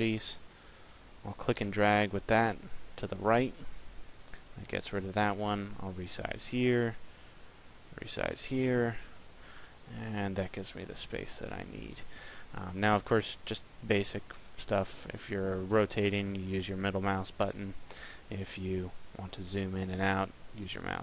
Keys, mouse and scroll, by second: 5.6 click, 7.8 click, 14.2 middle click, 18.5-19.1 scroll up 3, 19.1 scroll down 1, 19.2-19.8 scroll up 2, 19.8 scroll down 1, 20.0 scroll down 4, 20.3 scroll up 1, 20.3 scroll down 1, 20.5 scroll up 1.